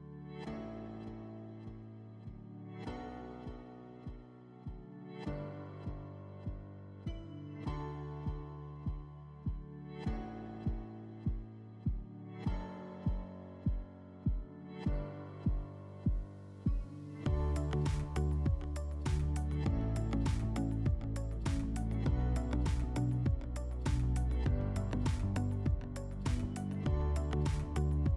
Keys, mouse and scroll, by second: 1.2 middle click, 1.8 F4, 2.2 click, 2.5 click, 2.8 click, 3.0 right click, 3.5 click, 3.5 middle click, 3.6 right click, 4.1 click, 4.4 click, 4.5 click, 4.7 click, 5.2 click, 5.2 click, 5.4 ctrl+click, 5.9 alt+middle click, 6.0 ctrl+click, 6.5 ctrl+alt+click, 6.6 alt+middle click, 7.6 alt+middle click, 7.7 middle click, 8.0 ctrl+click, 8.2 ctrl+click, 8.7 alt+middle click, 9.3 click, 9.8 click, 9.9 click, 10.0 click, 10.1 click, 10.3 3, 10.6 click, 10.9 click, 11.3 shift+click, 11.6 click, 11.8 click, 12.0 click, 12.1 click, 12.1 click, 12.2 3, 12.4 click, 12.6 click, 12.8 click, 13.1 middle click, 13.2 middle click, 13.3 click, 13.3 scroll up 2, 13.3 click, 13.6 click, 13.6 click, 13.8 typing, 13.9 scroll down 3, 14.1 click, 14.7 alt+middle click, 14.9 click, 15.6 alt+middle click, 15.9 alt+middle click, 16.3 ctrl+click, 16.9 click, 17.1 click, 17.4 click, 17.5 click, 18.0 alt+middle click, 18.0 click, 18.3 click, 18.5 click, 18.6 click, 18.8 click, 19.4 alt+middle click, 19.7 click, 20.0 click, 20.3 click, 20.5 click, 20.7 click, 21.0 click, 21.2 ctrl+click, 21.2 ctrl+click, 21.7 alt+middle click, 21.9 ctrl+click, 22.4 alt+middle click, 22.8 ctrl+click, 22.8 ctrl+click, 23.0 ctrl+click, 23.4 alt+middle click, 23.8 ctrl+click, 24.4 alt+middle click, 25.0 click, 25.3 click, 25.4 click, 25.5 click, 25.6 click, 25.7 3, 25.9 click, 26.1 click, 26.6 click, 26.8 click, 26.9 click, 27.0 click, 27.0 click, 27.2 3, 27.3 click, 27.6 click, 27.8 click, 28.1 middle click.